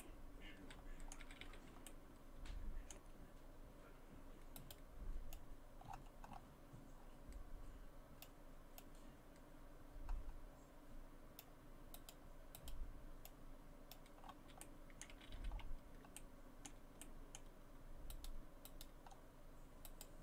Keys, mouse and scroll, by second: 0.0 middle click, 1.2 a, 1.5 a, 1.9 middle click, 3.4-4.1 scroll up 1, 4.1-4.5 scroll up 1, 4.6 right click, 5.4 click, 8.2 click, 8.8 click, 12.0 right click, 12.6 right click, 13.3 click, 14.2-14.6 scroll down 3, 14.6 middle click, 15.1 a, 15.3 a, 15.5 scroll up 4, 16.2 shift+middle click, 17.0 middle click, 18.1 right click, 18.7 right click, 19.1 scroll down 2, 19.9 right click.